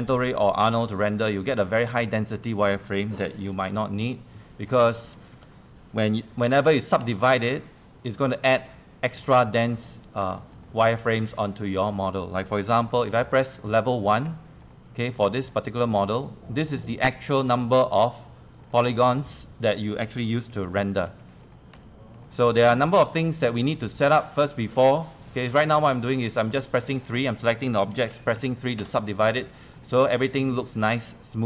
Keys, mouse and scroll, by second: 0.4 click, 3.3 click, 4.0 click, 4.7 1, 5.3 2, 6.5 3, 7.5 3, 10.5 click, 12.9 1, 13.0 1, 13.3 click, 14.6 1, 15.4 click, 15.4 1, 15.8 1, 16.7 click, 17.1 1, 17.8 click, 21.1-24.5 typing, 21.4 click, 22.2 click, 23.2 click, 24.0 click, 25.0 click, 25.9 3, 27.0 click, 28.1 3, 28.5 click, 28.8 3, 29.5 3.